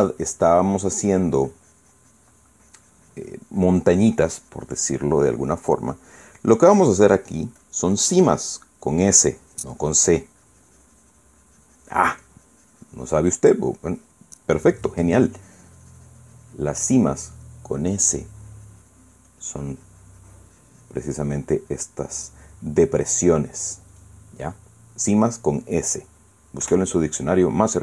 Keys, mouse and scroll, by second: 0.4 ctrl+z, 0.9-12.8 ctrl+drag, 12.9-15.0 drag, 15.9-18.3 drag, 18.5-22.6 drag, 22.7-25.8 middle drag, 26.4 middle click, 27.0 middle click, 27.3 KP_1.